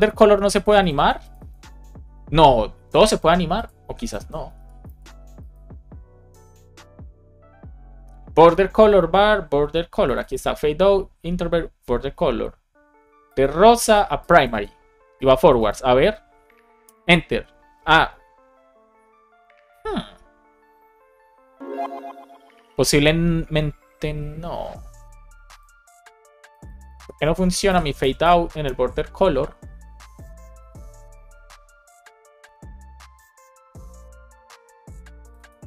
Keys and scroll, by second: 1.6 super+c, 4.5 super+v, 4.8 super+s, 16.7 Return, 26.9 super+c, 27.4 super+f, 27.6 super+v, 27.9 Return.